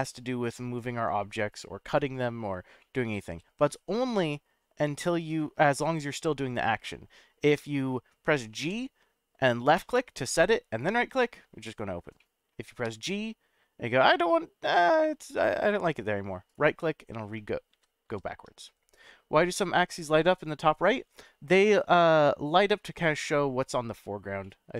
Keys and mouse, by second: 1.5 click, 2.0 right drag, 2.8-5.6 middle drag, 8.6 g, 9.7 click, 10.9 right drag, 12.2-12.5 middle drag, 12.8 g, 16.5 right click, 17.7 ctrl+z, 20.9-21.4 middle drag, 22.0 middle click, 24.4-24.7 middle drag.